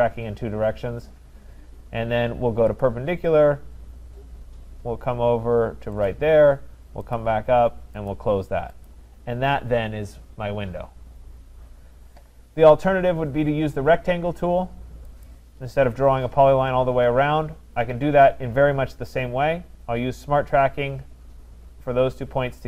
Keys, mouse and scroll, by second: 2.8 click, 6.1 click, 7.1 click, 8.1 click, 8.9 click, 15.2-20.3 drag.